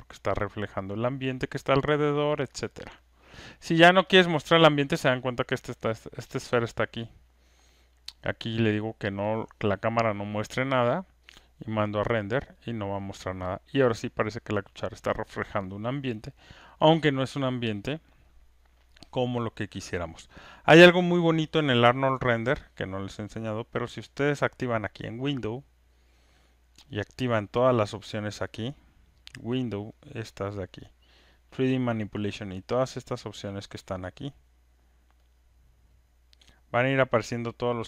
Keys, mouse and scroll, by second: 2.9 click, 4.4 click, 8.2 click, 9.7 click, 11.3 click, 17.5 click, 21.2 click, 24.2 click, 26.9 click, 33.0 click, 34.1 click, 36.0 click, 37.0 click.